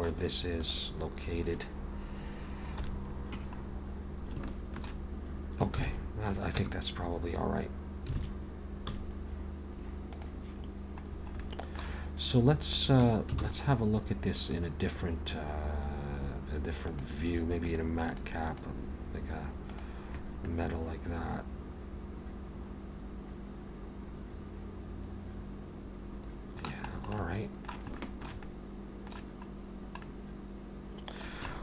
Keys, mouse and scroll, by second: 0.6 click, 2.7 KP_1, 3.7-4.4 scroll up 1, 4.4 scroll up 2, 4.4 shift+middle click, 5.9 alt+a, 6.6 Tab, 8.2 alt+a, 8.9 z, 11.1-11.4 scroll down 4, 11.4 middle click, 13.0 Tab, 13.4 alt+a, 16.0 click, 20.5 middle click, 26.9-27.3 scroll up 2, 27.2 middle click, 28.0 shift+middle click, 28.4 middle click, 29.5 scroll down 1, 30.0 middle click, 31.5 shift+middle click.